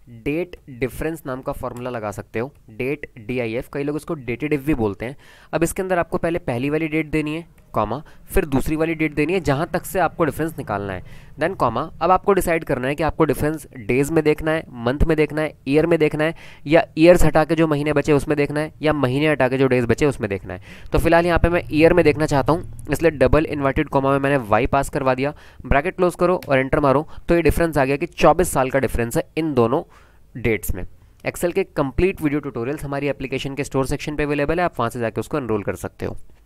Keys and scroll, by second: 0.0-3.6 typing, 5.9 shift+9, 7.6 ,, 11.3 ,, 23.5 shift+', 23.9 y, 25.2 shift+', 25.9 shift+0, 26.5 Return.